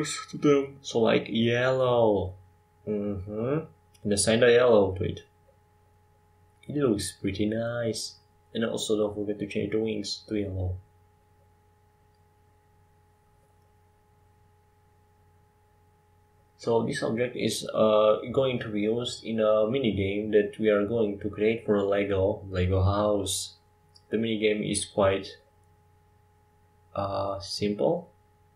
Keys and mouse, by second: 13.2 ctrl+j.